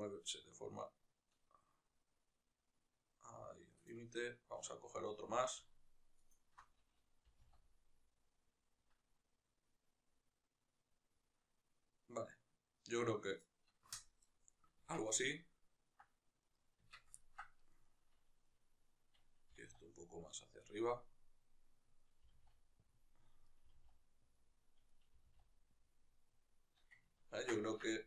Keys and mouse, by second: 3.6 shift+right click, 5.9-7.1 alt+shift+right drag, 7.1 g, 14.7 Tab, 15.1-16.2 ctrl+middle drag, 16.2 right click, 16.7 Tab, 16.9 ctrl+middle click, 17.3-19.2 right drag, 19.2 g, 21.7 right click, 22.0 g, 23.2 right click, 23.4 g, 24.6 right click, 24.8 g, 26.8-28.0 ctrl+middle drag, 27.6 Tab.